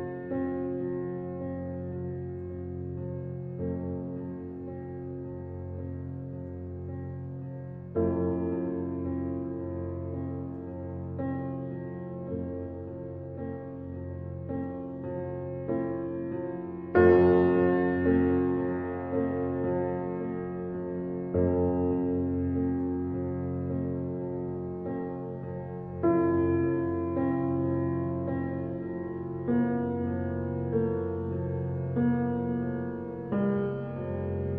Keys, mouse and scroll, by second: 0.5 shift+click, 1.6 ctrl+KP_Add, 3.7 click, 4.2 shift+click, 6.6 s, 13.5 click, 15.3 shift+click, 15.8 s, 21.5 click, 22.4 shift+click, 22.9 s, 28.0-29.2 middle drag, 29.2-29.6 scroll down 1, 29.6-32.8 middle drag, 32.8-33.2 scroll up 1, 33.2-34.5 shift+middle drag.